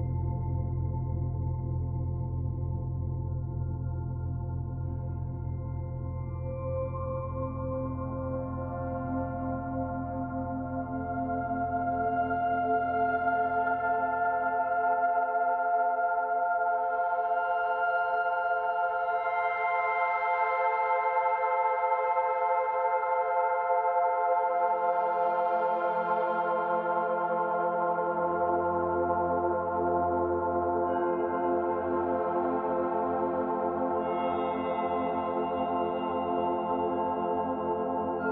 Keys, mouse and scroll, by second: 0.7 click, 4.5 click, 10.2 click, 11.3 middle click, 12.6 middle click, 13.1 Tab, 13.7 middle click, 14.8 Tab, 15.2 Tab, 17.3 click, 18.2 middle click, 20.0 click, 20.3 middle click, 21.1 middle click, 21.7 click, 22.1 shift+click, 22.5 middle click, 23.9 Delete, 28.6 click, 30.8 shift+click, 31.8 Delete, 33.0 Tab, 33.5 scroll down 1, 33.8 middle click, 34.6 Tab, 35.0 middle click, 35.2 middle click, 35.7-36.1 scroll up 1, 36.4 click, 36.8 shift+click, 37.9 Delete.